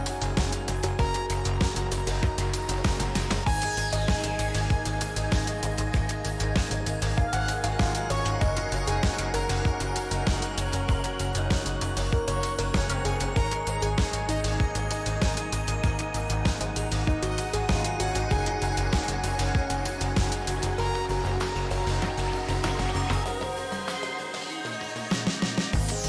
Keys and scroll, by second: 14.0 F2, 16.6 a, 16.6 l, 16.7 Return.